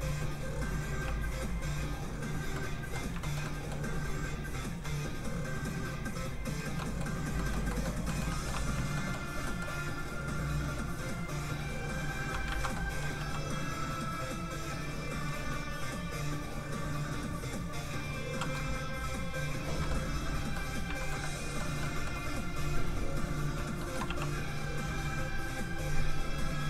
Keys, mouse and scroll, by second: 1.0 f, 1.2 click, 2.5 middle click, 3.2 shift+middle click, 3.4 middle click, 3.5 middle click, 4.4 click, 6.7 middle click, 7.1 scroll down 1, 7.3 middle click, 8.1 shift+middle click, 8.7 shift+middle click, 8.9 shift+middle click, 9.3 scroll down 1, 9.4 middle click, 10.6 f, 10.8 click, 12.5 ctrl+z, 12.7 middle click, 13.1 f, 13.3 click, 18.6 ctrl+click, 19.9 click, 20.0 middle click, 21.0 shift+middle click, 21.2 middle click, 22.6 click, 23.8 shift+middle click, 24.0 middle click, 24.1 f, 24.2 click.